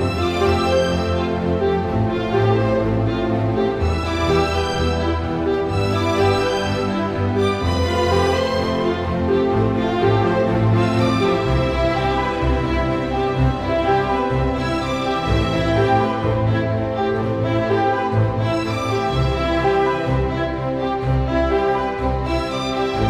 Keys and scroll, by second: 0.7 super+v, 4.9 super+t, 17.0 super+s.